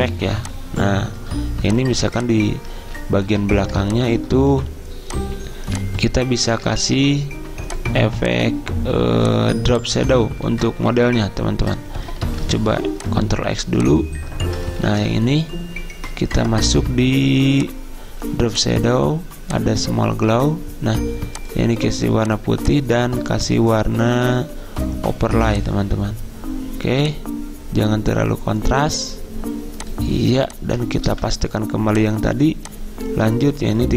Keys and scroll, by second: 10.5 ctrl+z, 12.3 ctrl+x, 31.2 ctrl+v.